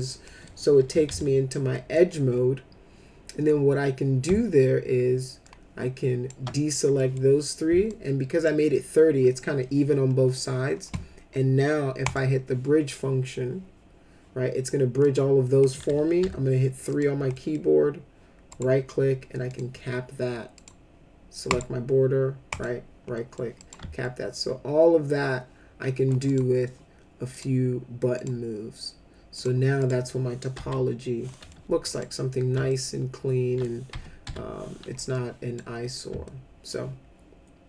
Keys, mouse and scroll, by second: 0.2 middle click, 0.8 f, 1.1 z, 1.7 middle click, 5.4 alt+click, 6.9 middle click, 7.9 alt+click, 12.0 click, 15.0 click, 15.7 middle click, 16.2 3, 16.9 click, 17.3 middle click, 18.5 right click, 19.5 click, 20.5 click, 21.5 right click, 22.5 click, 23.1 middle click, 23.6 click, 24.0-26.1 alt+middle drag, 26.3 click, 27.3 click, 28.1 click, 29.3 click, 29.8 click, 30.5 F4, 31.3 middle click, 31.9 click, 32.7 alt+middle click, 33.9 F5, 34.2 F4, 35.1 click, 36.2 alt+middle click.